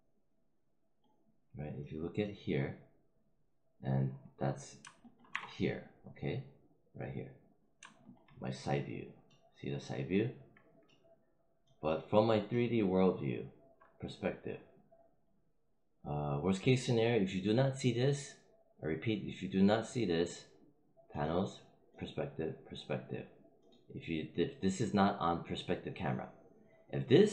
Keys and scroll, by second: 5.2 5.